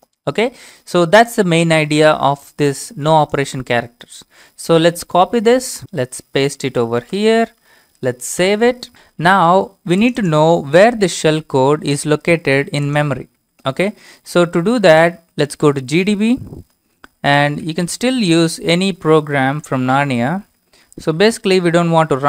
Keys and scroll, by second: 5.1 ctrl+c, 6.9 ctrl+v, 8.4 Return, 14.2-15.6 typing, 16.8-19.6 typing, 20.9-21.3 typing.